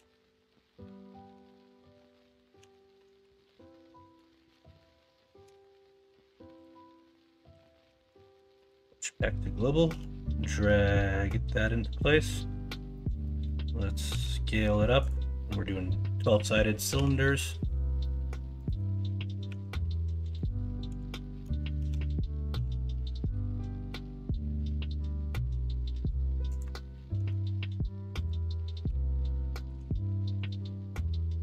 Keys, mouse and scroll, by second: 0.3 KP_1, 0.6 KP_3, 1.3 Tab, 2.5 r, 4.4 ctrl+z, 5.4 ,, 7.5 r, 9.9 g, 12.9 shift+middle click, 14.1 s, 16.9 g, 19.4 s, 20.9 h, 21.7 ctrl+z, 22.5 g, 27.1 s, 28.8 g, 29.7 s, 30.5 g.